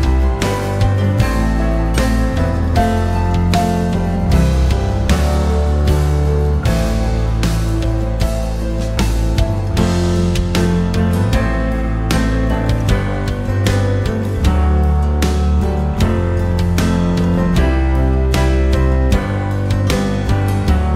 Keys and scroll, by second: 16.0 r, 17.6 w, 18.7 r.